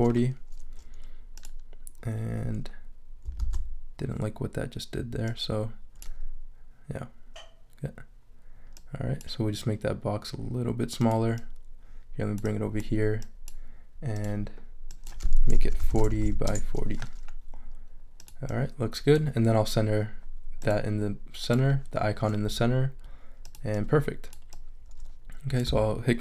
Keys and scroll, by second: 3.4 super+z, 15.4-16.7 typing.